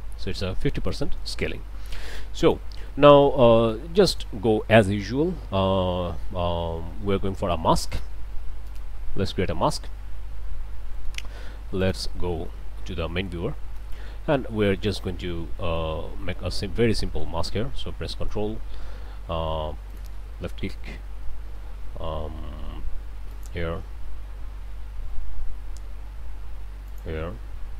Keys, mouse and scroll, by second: 0.3 scroll up 2, 0.9 click, 2.2 click, 2.9 click, 3.7 click, 4.7 click, 7.9 click, 8.7 click, 10.9 click, 11.8 ctrl+shift+click, 12.7 ctrl+shift+click, 13.1-13.5 scroll up 2, 13.8 ctrl+space, 14.2-14.8 ctrl+scroll up 3, 14.8 middle click, 15.3 scroll down 2, 15.6 middle click, 16.0-16.6 scroll up 4, 17.0 click, 19.9 ctrl+click, 23.3 ctrl+click, 26.9 ctrl+click.